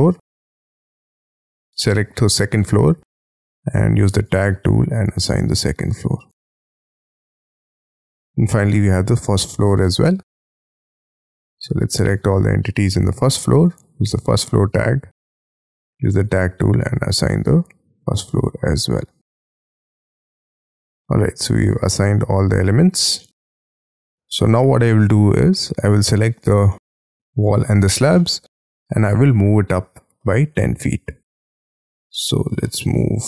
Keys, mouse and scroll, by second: 0.4 middle click, 0.5-1.7 scroll up 4, 4.7-5.7 scroll up 8, 5.7-7.3 scroll up 4, 7.3-7.8 scroll down 13, 8.0 scroll up 7, 8.5 middle click, 10.8 middle click, 13.1-16.3 scroll up 6, 16.3 scroll up 6, 17.4 middle click, 20.3-21.6 scroll down 5, 21.6 double click, 21.9-22.6 scroll down 12, 22.6-23.2 scroll up 10, 23.2 middle click, 23.9-24.2 scroll down 6, 23.9 space, 24.3 middle click, 26.6 middle click, 28.1 middle click, 28.8 m, 28.9-30.1 scroll up 16, 30.1 middle click, 31.6-32.6 scroll down 13, 32.6 middle click.